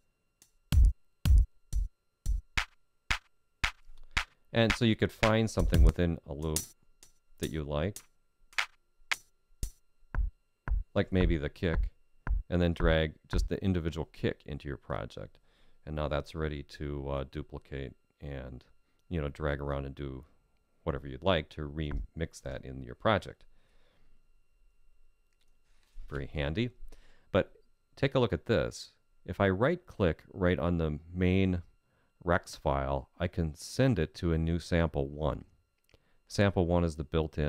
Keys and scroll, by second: 5.1 Up, 23.6 super+z.